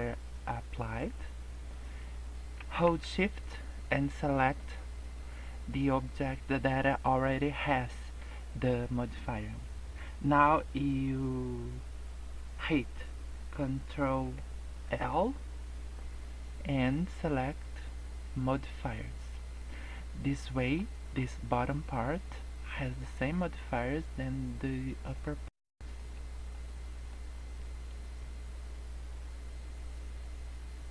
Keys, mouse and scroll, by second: 4.3 shift+click, 14.8 ctrl+l, 19.4 scroll down 1, 19.5 middle click, 20.2 scroll up 3, 20.5 middle click, 20.8-21.2 scroll down 2, 22.0 middle click, 25.0 scroll down 1, 25.1 middle click, 25.5 scroll up 3, 26.0 middle click, 26.3 scroll down 4, 26.5 middle click, 27.2 scroll up 1, 27.9 scroll up 2, 28.4 scroll down 2, 28.6 scroll up 1.